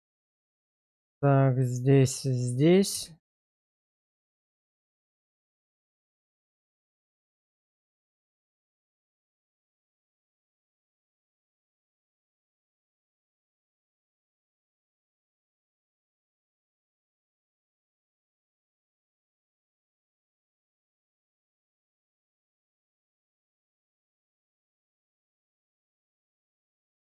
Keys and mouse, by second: 0.4 click, 2.2 shift+click, 2.9 x, 4.2 alt+click, 4.9 alt+shift+click, 5.9 shift+1, 6.5 shift+middle click, 7.0 shift+middle click, 8.0 shift+middle click, 9.8 click, 11.1 alt+z, 14.1 x, 15.4 alt+click, 15.9 alt+shift+click, 16.8 shift+1, 17.5 shift+middle click, 18.4 shift+middle click, 19.0 click, 20.5 shift+click, 22.1 x, 23.5 alt+click, 25.5 shift+1, 26.6 middle click.